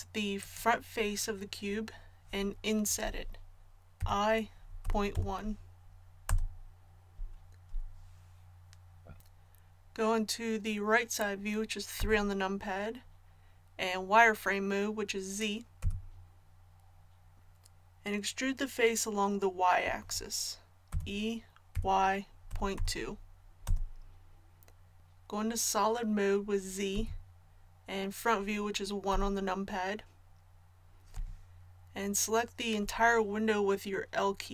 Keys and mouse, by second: 4.0 i, 11.9 KP_3, 15.8 z, 20.9 e, 26.9 z, 29.1 KP_1.